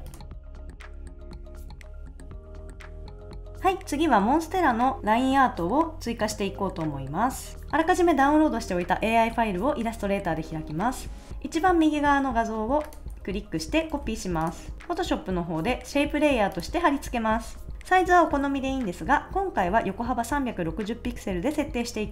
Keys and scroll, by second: 0.2 shift+Right, 0.3 super+s, 0.5 super+s, 1.0 Right, 1.2 super+s, 1.4 shift+Down, 1.4 shift+Up, 1.5 super+s, 1.8 super+s, 1.9 Right, 2.0 super+s, 2.6 shift+Left, 2.6 shift+Right, 3.1 super+s, 13.9 super+c, 14.7 super+v.